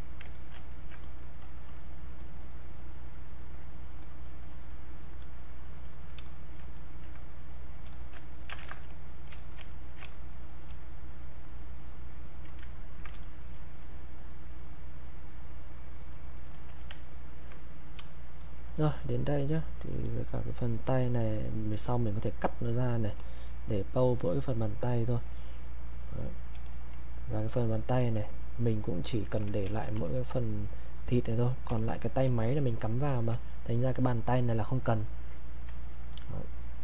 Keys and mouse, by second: 0.3 alt+click, 0.7 ctrl+right click, 1.0-6.3 ctrl+drag, 6.8 ctrl+right click, 7.9 alt+click, 8.3 ctrl+right click, 8.6 ctrl+z, 9.4 alt+click, 9.7 ctrl+alt+right click, 10.1 ctrl+space, 10.5 ctrl+click, 10.6 ctrl+space, 11.1 ctrl+click, 12.8 ctrl+right click, 13.2-16.6 alt+drag, 16.6 alt+click, 17.0 ctrl+right click, 18.4 alt+click, 23.1 click, 29.6 ctrl+shift+1, 30.1-32.8 drag.